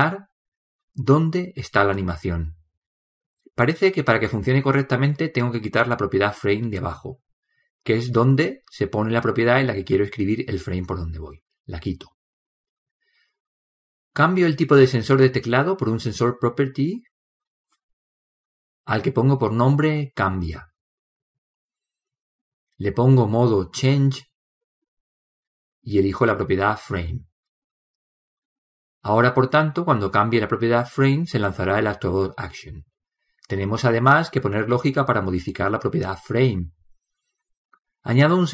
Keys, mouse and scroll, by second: 28.7-38.5 drag.